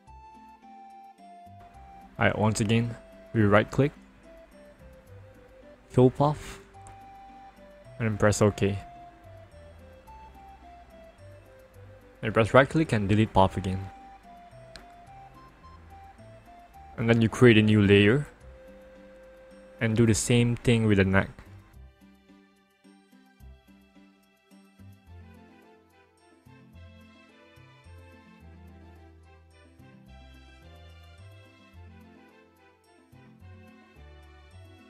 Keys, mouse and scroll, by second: 0.6 alt+click, 2.3 ctrl+click, 4.9 right click, 6.9 click, 8.9 click, 11.8 right click, 12.8 click, 14.5-15.5 scroll down 1, 15.7 ctrl+-, 17.6-19.3 scroll down 1, 19.3 click, 21.4 click, 23.9 click, 25.8 click, 28.2 alt+click, 29.5 click, 32.1 alt+click.